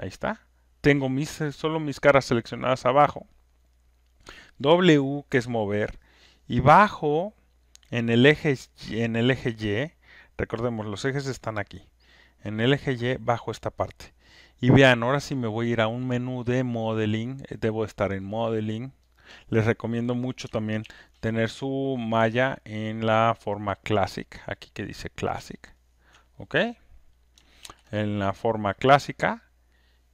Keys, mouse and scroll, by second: 3.4 alt+click, 4.0 alt+right click, 7.3 click, 9.1 alt+scroll, 10.1 alt+middle click, 18.3 click, 19.1 click, 20.8 ctrl+F1, 21.6 click, 24.3 ctrl+click, 26.4 click, 27.6 ctrl+F1.